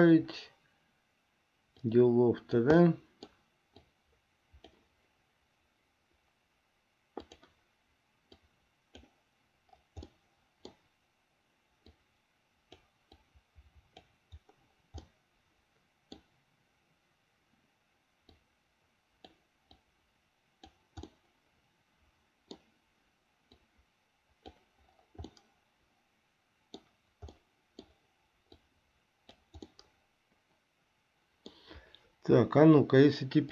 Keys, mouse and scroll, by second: 2.0 click, 3.0 middle click, 4.0 click, 7.4 click, 8.5 click, 10.4 middle click, 12.1-13.1 drag, 13.4 click, 15.3-16.4 middle drag, 18.5-19.6 drag, 20.0-21.1 drag, 21.4-22.9 middle drag, 23.7-24.9 drag, 25.6-27.0 middle drag, 27.6 middle click, 28.7-29.8 drag, 29.9-31.9 middle drag.